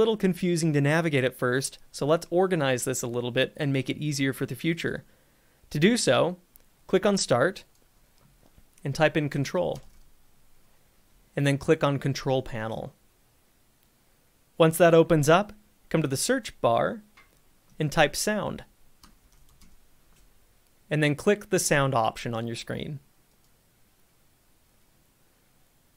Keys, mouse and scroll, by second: 4.9-7.5 drag, 9.0-10.5 typing, 12.8 click, 16.5 click, 18.8-20.1 typing, 23.5 click.